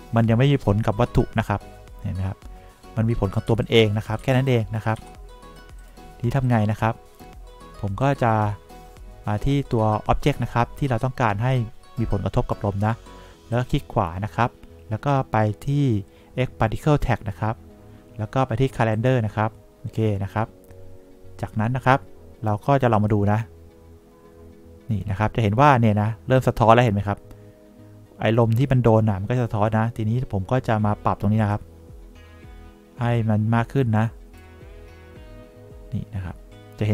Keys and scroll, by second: 3.8 1, 4.6 2, 5.3 3.